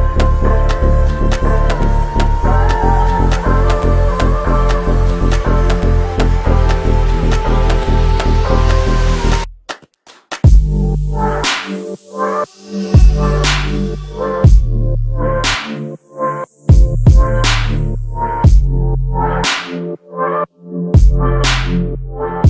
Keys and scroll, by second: 0.4 m, 2.5 s, 4.4-5.4 typing, 7.2 m, 12.4 space, 14.2 space, 16.1 s, 20.4 space.